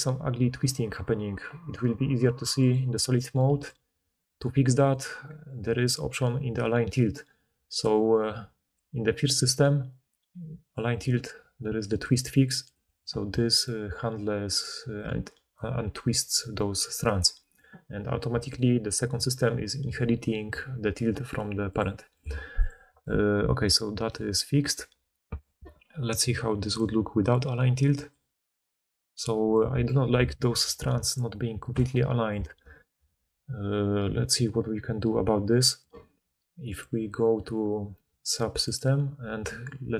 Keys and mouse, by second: 0.0-5.1 typing, 0.7-1.7 middle drag, 0.7-1.7 right drag, 2.7-3.6 drag, 10.7-12.0 drag, 12.1 click, 13.2-14.1 drag, 13.8-17.1 typing, 15.5-18.4 drag, 18.4-22.1 right drag, 22.1 click, 22.6-28.0 right drag, 28.0 middle click, 28.1 right click, 28.8 middle click, 28.9-30.6 drag, 30.6 d, 31.1 d, 31.2 d, 31.7 d, 36.7-38.6 drag.